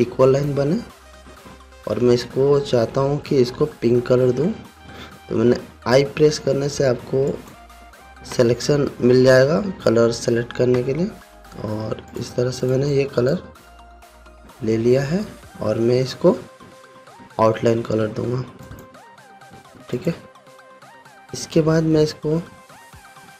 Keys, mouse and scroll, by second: 2.3 v, 4.5 i, 7.9 click, 12.1 v, 12.7-14.1 drag, 19.2 click, 22.4-22.7 alt+scroll up 1.